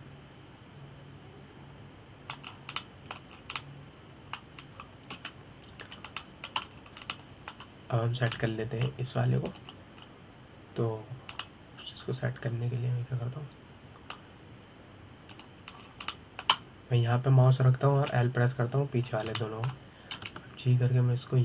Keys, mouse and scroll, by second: 1.4-4.2 middle drag, 4.2-4.5 scroll down 5, 4.5 middle click, 5.0 scroll down 4, 5.3-6.8 middle drag, 6.8 KP_7, 7.5-7.8 scroll up 1, 7.8 shift+middle click, 8.3-8.8 scroll up 2, 8.8-11.2 shift+middle drag, 11.2 scroll up 1, 11.7-12.3 scroll down 2, 13.1-16.1 middle drag, 17.0 click, 17.4 scroll up 2, 17.8-19.7 shift+middle drag, 19.7 l, 20.7-21.1 scroll down 2, 21.1 shift+middle click.